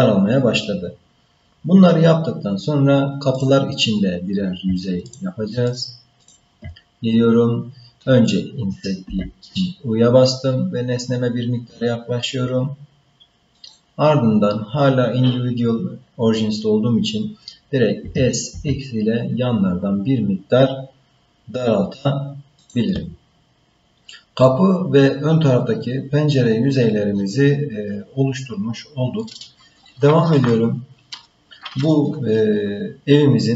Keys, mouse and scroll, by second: 3.3 click, 5.1 shift+click, 5.7 shift+click, 6.2 shift+click, 9.0 i, 18.0 s.